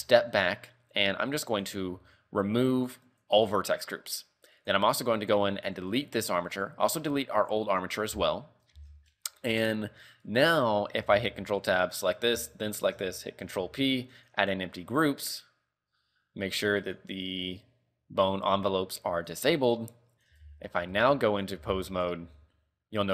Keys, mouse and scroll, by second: 0.0 ctrl+Tab, 1.6 click, 4.7 click, 5.9 click, 7.5 click, 8.3 z, 8.5 middle click, 8.9 z, 9.1 middle click, 9.5 KP_3, 10.4 right click, 11.2 ctrl+Tab, 11.9 right click, 12.7 shift+right click, 13.7 ctrl+p, 14.9 right click, 17.0 right click, 19.3 click, 20.7 ctrl+Tab, 21.2 ctrl+Tab, 21.4 right click, 21.8 ctrl+Tab, 22.4 r.